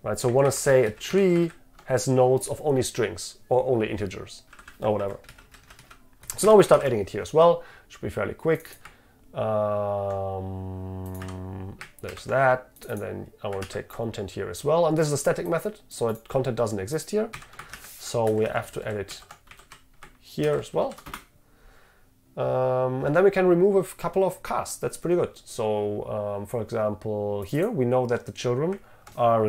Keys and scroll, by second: 6.8 ctrl+v, 12.2 ctrl+v, 17.9 ctrl+v.